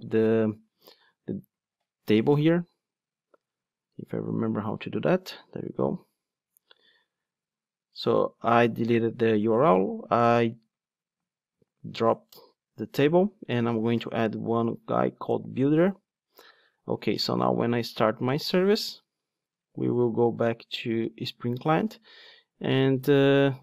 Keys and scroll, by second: 6.0 Delete, 15.4 Return, 17.8 ctrl+d.